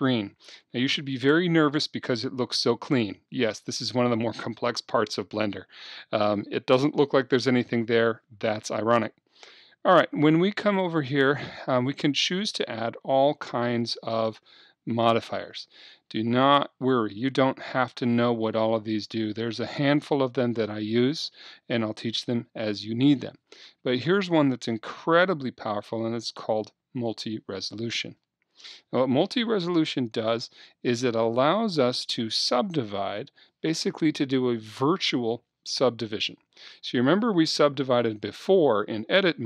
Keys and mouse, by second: 11.8-13.8 drag.